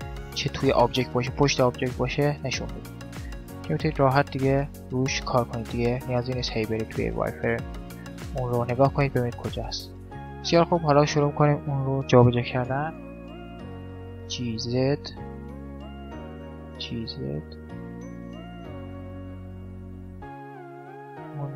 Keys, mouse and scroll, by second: 2.4-7.2 middle drag, 6.4 z, 7.5 z, 9.2 middle click, 10.4-12.0 drag, 10.4 right click, 12.0 g, 12.6 middle click, 14.2-15.5 middle drag, 15.4-17.1 drag, 15.5 right click, 16.3 g, 17.3 middle click, 17.9 middle click, 18.4-19.5 drag, 18.4-20.1 right drag, 19.3 g, 21.1-21.5 middle drag.